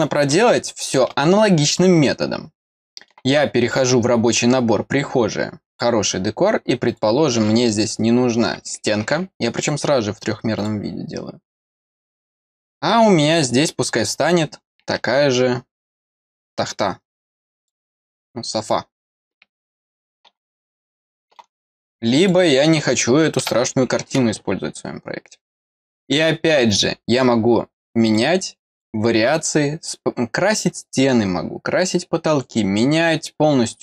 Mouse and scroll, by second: 0.5-1.7 middle drag, 2.7 middle click, 5.7 click, 6.8 click, 10.6 click, 12.4 click, 17.6 click, 20.7 middle click, 22.1 click, 25.7 click, 26.7 click, 28.0 click, 28.7 click.